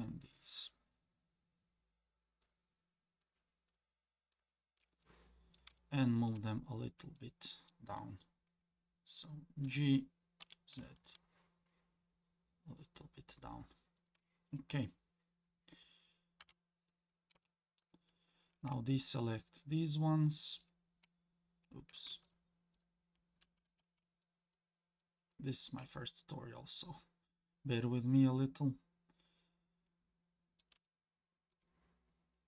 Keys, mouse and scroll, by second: 0.0 shift+click, 0.7 shift+click, 2.4 shift+click, 3.2 shift+click, 3.7 shift+click, 4.3 shift+click, 5.0 middle click, 5.8 shift+middle click, 6.7-7.2 scroll down 1, 7.2 middle click, 9.6 g, 16.4 KP_7, 17.4 shift+middle click, 18.9 ctrl+click, 20.5 ctrl+click, 22.3 shift+click, 22.7 ctrl+shift+click, 24.2 ctrl+click, 25.0 ctrl+click, 29.9 middle click, 30.9 shift+middle click.